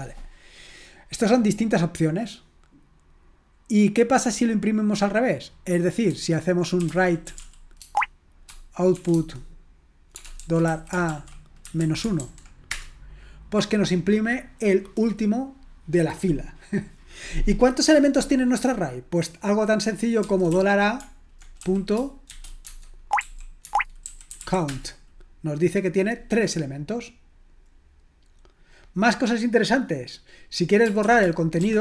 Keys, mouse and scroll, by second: 3.7-4.8 scroll up 1, 4.8 scroll up 1, 7.6-8.9 typing, 9.1 Tab, 10.1-12.7 typing, 22.3-24.9 typing.